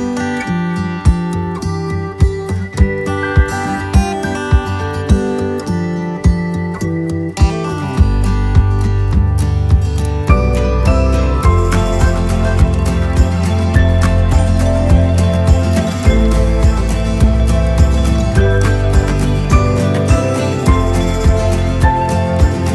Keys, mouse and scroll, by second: 0.5 click, 1.7 click, 2.7-3.7 right drag, 4.3 right click, 6.9-8.7 drag, 9.7 shift+click, 11.3 click, 11.7 click, 12.1-15.1 right drag, 15.5 right click, 16.9 right click, 17.6 right click, 18.1 right click, 18.9 right click, 21.5 right click.